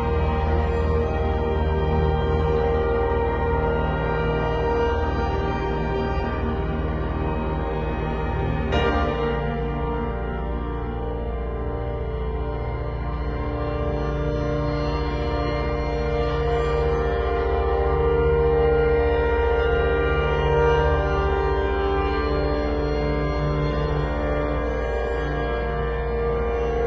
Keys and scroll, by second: 2.6 super+], 3.7 super+t, 6.4 z, 7.1 space, 7.9 v, 8.3 super+t, 13.6 b, 14.3 ], 17.0 [, 18.0 [, 21.1 v, 22.5 super+l.